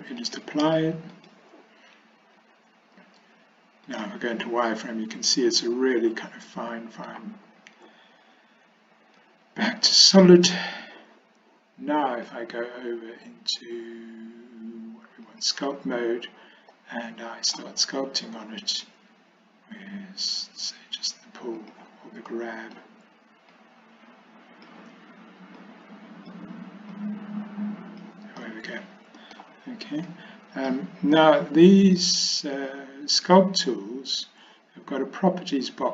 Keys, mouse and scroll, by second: 0.2-1.4 drag, 2.4 z, 5.4-7.1 middle drag, 9.3 z, 12.2-15.6 drag, 16.8 middle click, 21.7 click, 22.4 middle click, 23.6-24.7 drag, 25.6 click, 27.0-28.1 drag, 28.5 middle click, 30.1 click, 31.3 click, 32.8 click.